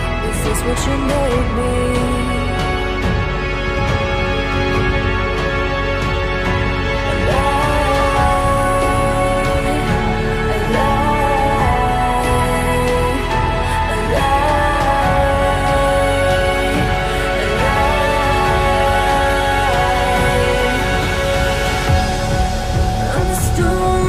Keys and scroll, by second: 0.2 F4.